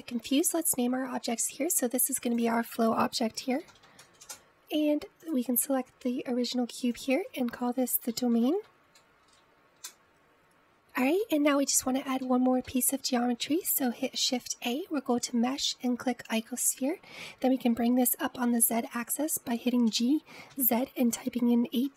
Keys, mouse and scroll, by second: 0.3 scroll down 3, 1.2-3.3 scroll up 2, 3.5-6.4 drag, 8.1 click, 8.2-10.7 drag, 12.3-15.3 shift+middle drag, 15.3 shift+a, 21.0 g.